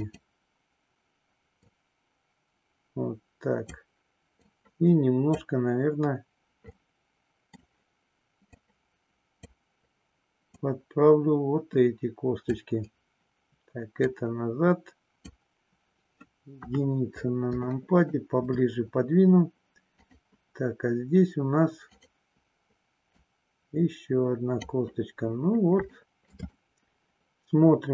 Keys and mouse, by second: 1.7-3.6 drag, 4.4-5.5 drag, 6.7 middle click, 8.6 click, 10.5-12.5 drag, 14.0-15.2 drag, 16.6 KP_1, 17.6 shift+middle click, 19.9 click, 23.2-24.6 drag, 26.0 shift+middle click, 26.5-27.9 middle drag.